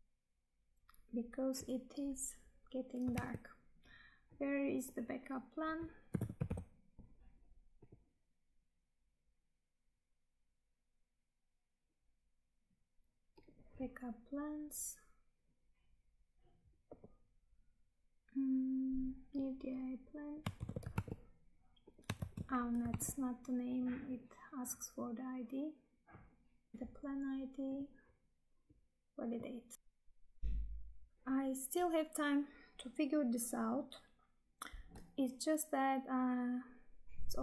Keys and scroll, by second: 3.3 Tab, 20.5 ctrl+c, 21.0 Tab, 22.1 ctrl+v, 23.0 Tab, 26.7 ctrl+v.